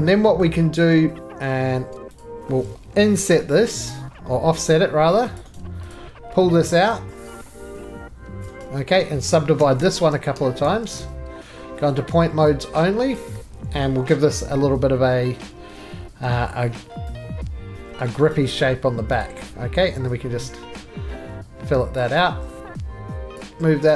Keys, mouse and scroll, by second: 0.3 middle click, 1.2 ctrl+z, 1.2 middle click, 2.2 click, 3.1 middle click, 3.9 o, 4.0 scroll, 5.4 click, 5.5 right click, 5.9 click, 8.4 click, 8.6 right click, 9.6-11.4 typing, 11.9 middle click, 12.5 s, 13.1 click, 13.8 middle click, 14.4 f, 15.5 Escape, 16.2 g, 18.1 click, 18.3 right click, 18.6 2, 19.2 click, 21.9 click, 22.2 right click, 22.4 scroll down 3, 22.6 click, 22.6 2, 22.8 scroll, 22.9 middle click, 23.1 middle click, 23.3 middle click, 23.3 click.